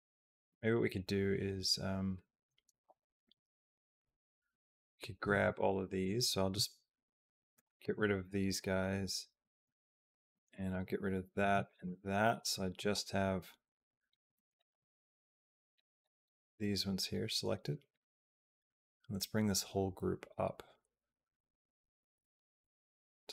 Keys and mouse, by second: 2.7 click, 5.0 b, 7.2 b, 10.3 shift+b, 11.2 b, 14.1 b, 17.5 g.